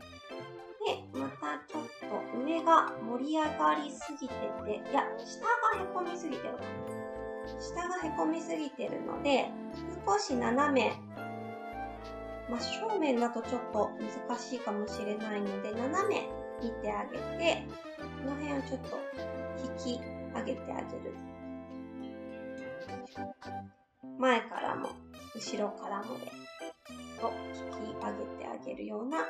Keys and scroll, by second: 6.7 s.